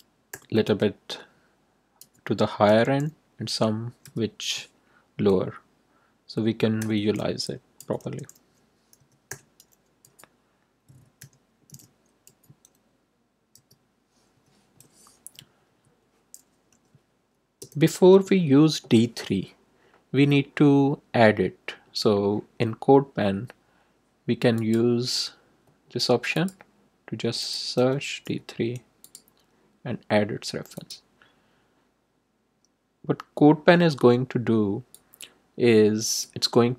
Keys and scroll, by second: 0.2 0, 2.0 ,, 2.6 space, 4.0 4, 6.8-10.0 typing, 11.1 7, 11.6 5, 12.2 ,, 13.5 3, 14.3 7, 15.6 Right, 16.6 ;, 17.6 Return, 27.7 d, 28.2 3.